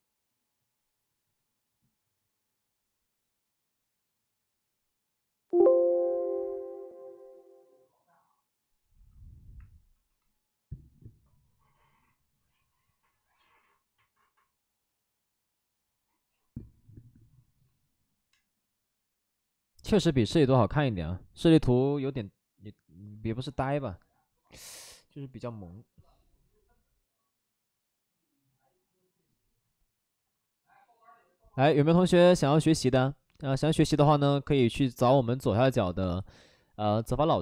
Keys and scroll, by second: 9.9 shift+r.